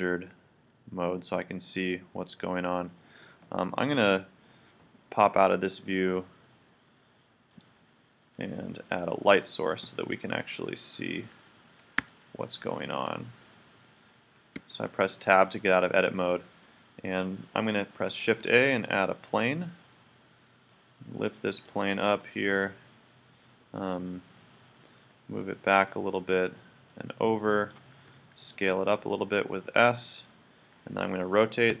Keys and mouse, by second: 9.0-10.8 drag, 12.0 KP_1, 14.6 Tab, 15.8-17.8 middle drag, 18.3 shift+a, 20.7-22.0 drag, 22.0 middle click, 24.7-26.3 drag, 26.9-28.7 drag, 28.1 s, 30.2-31.8 drag.